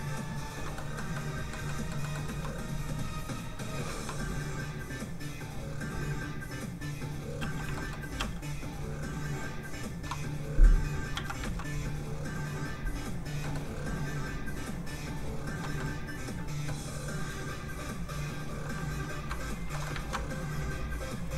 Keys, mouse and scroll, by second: 0.7 click, 0.8 middle click, 2.9 click, 4.7 click, 7.4 shift+f, 7.5 click, 7.7 shift+middle click, 8.1 middle click, 8.2 f, 8.4 click, 11.1 ctrl+z, 11.7 z, 11.8 click, 13.4 middle click, 14.1 ctrl+click, 15.8 click, 15.9 middle click, 17.5 click, 19.7 shift+middle click, 20.0 ctrl+z, 20.7 click.